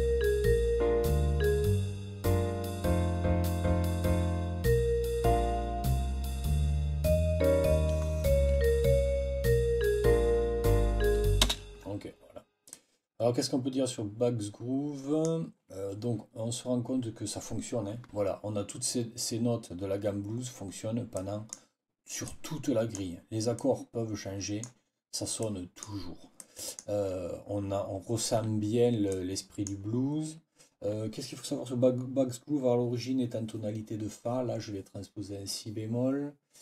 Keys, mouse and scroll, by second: 11.5 space, 12.6 click, 14.1 click, 14.5 click, 21.1 click, 22.1 click, 23.5 click, 23.6 scroll down 2, 23.7 click, 24.3-24.6 scroll down 4, 24.4 click, 24.6 click, 25.3-25.9 scroll down 2, 26.3 click, 29.0 click.